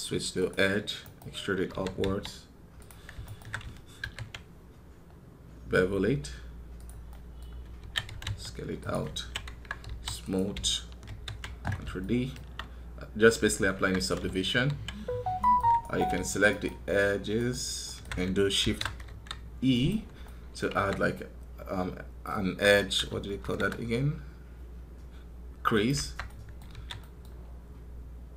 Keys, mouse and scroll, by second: 0.8 right click, 3.0 alt+right click, 15.6 alt+right click, 16.3 alt+shift+right click, 17.2 alt+shift+right click, 17.6 alt+shift+right click.